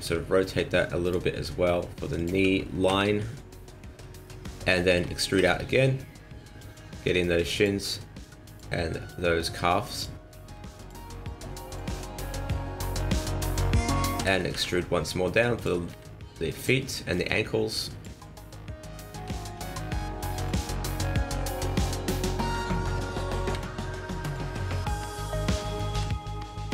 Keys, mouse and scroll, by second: 1.3 g, 2.8 KP_1, 4.2 shift+middle click, 5.3 e, 6.9 s, 8.1 click, 9.0 click, 10.3 s, 11.2 click, 12.6-13.1 scroll down 1, 13.1 scroll up 1, 14.1 e, 15.8 s, 17.1 click, 19.1 g, 21.6 click, 23.5 s, 25.9 e.